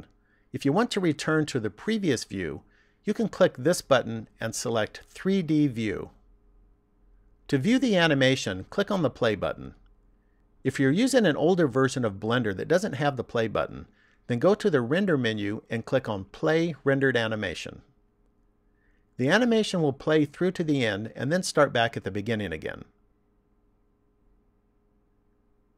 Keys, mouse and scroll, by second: 6.3 click, 15.1 click.